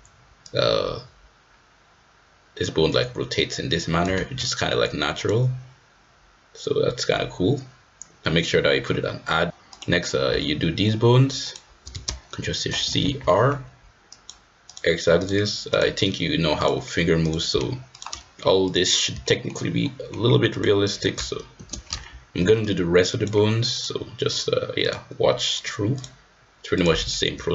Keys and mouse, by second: 0.4-4.1 drag, 4.3 ctrl+z, 5.1-6.2 drag, 13.1 ctrl+shift+c, 14.1 click, 14.7-15.3 drag, 15.7-16.7 drag, 17.2-18.0 drag, 18.6-19.7 drag, 19.8 shift+click, 21.9 ctrl+shift+c, 23.1 click, 23.7-24.4 drag, 24.8 click, 25.9-26.8 drag, 27.1 shift+middle drag.